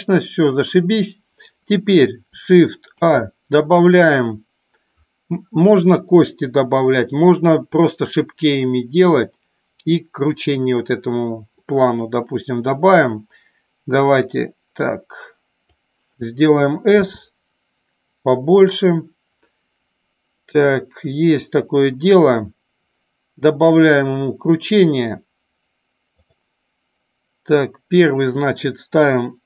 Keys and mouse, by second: 3.0 shift+a, 15.1 click, 18.8 click, 26.2 click.